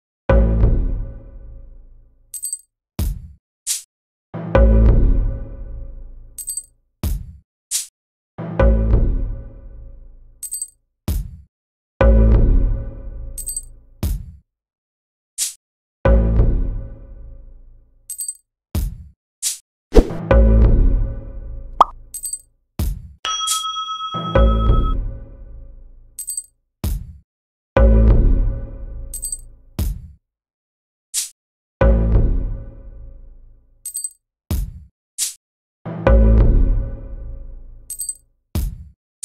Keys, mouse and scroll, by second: 0.6 click, 1.3 drag, 2.2 click, 3.6 click, 4.7 click, 5.3 click, 6.1 click, 6.5 click, 7.2 click, 7.8 click, 10.5 click, 14.3 click, 16.5 click, 20.3 click, 20.6 click, 21.0 click, 21.2 click, 21.4 click, 21.6 click, 22.8 click, 23.0 click, 23.2 click, 23.3 click, 23.5 click, 26.7 click, 28.1 click, 31.1 click, 31.8 click, 33.8 click, 35.2 click, 37.4 click, 38.3 click.